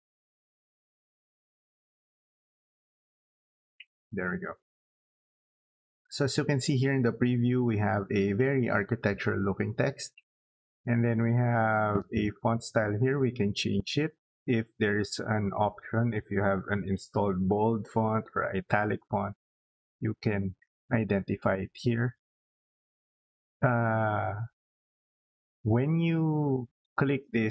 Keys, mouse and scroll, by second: 4.1 click, 12.7 click, 13.5 click.